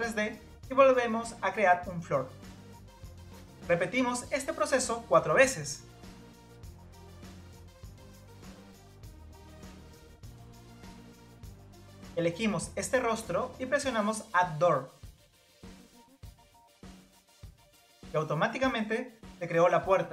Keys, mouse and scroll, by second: 0.0-0.7 scroll down 1, 0.7-1.4 scroll down 1, 1.4-1.8 scroll down 1, 1.8 click, 2.8 click, 3.2 scroll down 2, 3.9 click, 4.7 click, 5.2-6.4 middle drag, 6.4 click, 6.6-7.1 scroll down 2, 7.1 click, 8.5 click, 8.8 scroll down 1, 9.1 click, 9.6 click, 10.0-11.8 middle drag, 11.8 scroll up 1, 13.2 click, 17.4 click, 18.3-20.0 scroll up 1, 20.0 scroll up 1.